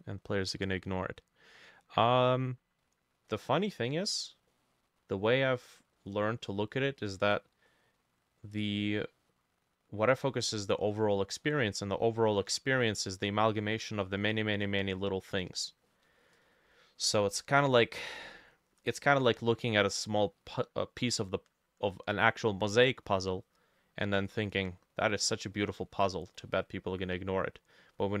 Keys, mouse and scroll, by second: 0.5 middle click, 3.3 middle click, 4.1-4.5 scroll up 1, 4.5 middle click, 5.5 middle click, 6.0 middle click, 6.5 middle click, 7.0 middle click, 7.7 middle click, 8.4 middle click, 10.1 scroll down 1, 10.3 middle click, 10.9 middle click, 11.4 middle click, 12.0 scroll up 1, 12.3 middle click, 14.0 middle click, 15.9 middle click, 16.8 middle click, 18.0 middle click, 25.6 middle click, 26.0-26.4 scroll down 2, 26.4 middle click, 27.0 middle click, 27.6-28.2 scroll up 2.